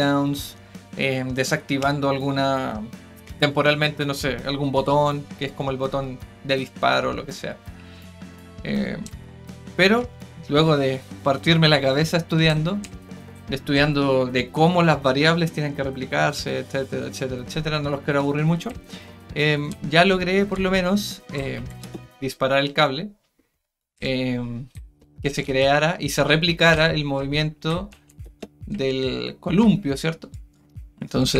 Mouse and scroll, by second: 22.1-24.0 right drag, 30.3 right click, 30.5-31.3 right drag.